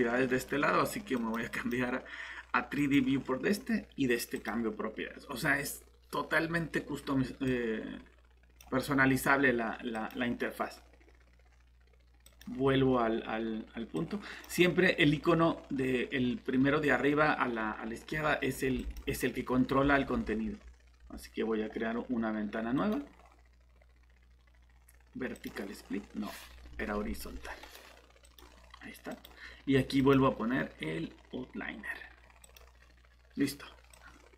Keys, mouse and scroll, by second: 22.8 right click, 25.3 click, 26.9 Escape, 27.6 right click, 28.2 click.